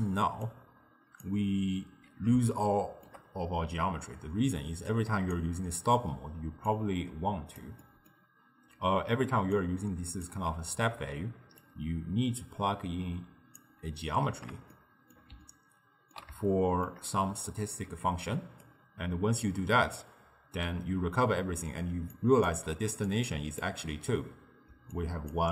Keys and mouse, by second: 0.5 click, 2.5-5.0 shift+middle drag, 5.0 click, 6.7 click, 7.9-9.4 middle drag, 9.4 d, 9.6 click, 10.3 d, 11.7 click, 14.8-17.9 shift+middle drag, 17.9 d, 18.1 right click, 18.7 d, 18.8 d, 20.0 d, 21.6-25.5 typing, 22.2 click, 23.1-23.7 drag, 25.0-25.4 drag.